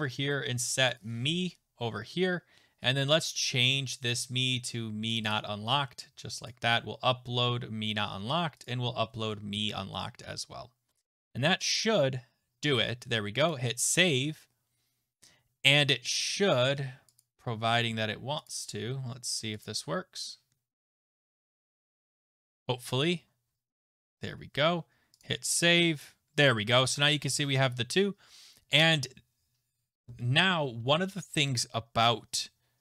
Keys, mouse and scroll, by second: 1.0 click, 1.1 click, 2.9 click, 5.2 click, 5.3 click, 6.5 click, 8.6 click, 13.5 click, 15.9 click, 17.2 click, 18.5 click, 18.6 click, 19.6 click, 22.5 click, 25.2 click, 30.6-32.6 scroll.